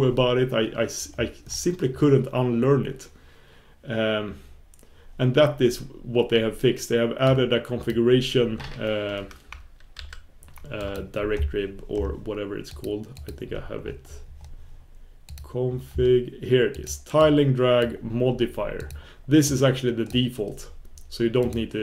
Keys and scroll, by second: 9.3 super+b, 10.0 super+s.